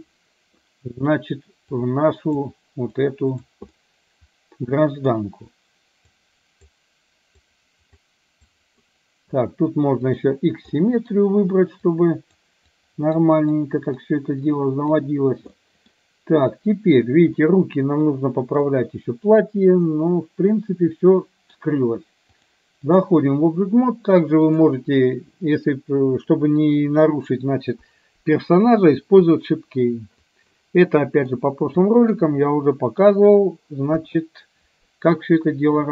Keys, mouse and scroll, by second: 1.8 click, 3.1 click, 3.8-5.2 middle drag, 6.2 click, 7.4 click, 8.6 click, 10.8 middle click, 11.9 click, 12.8 click, 13.6 click, 14.6 click, 15.7 middle click, 17.4-18.7 middle drag, 19.4-21.6 middle drag, 22.4-23.2 drag, 24.6 click, 30.6-31.4 middle drag, 32.1 middle click, 33.1 KP_3, 33.9 KP_1.